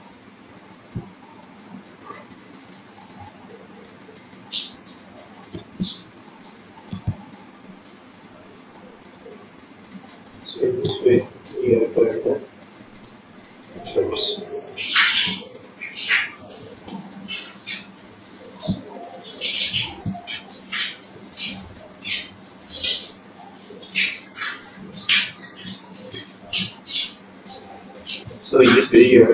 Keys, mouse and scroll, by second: 2.2 click, 3.5 click, 6.9 click, 8.8 click, 9.7-10.6 scroll down 8, 10.6-11.8 scroll up 5, 11.8-12.7 scroll up 3, 15.3 ctrl+click, 18.0 ctrl+click, 19.3 ctrl+click, 21.1 ctrl+click, 23.3 ctrl+click, 23.8 ctrl+click, 27.3 click, 27.8 click, 29.2 ctrl+click.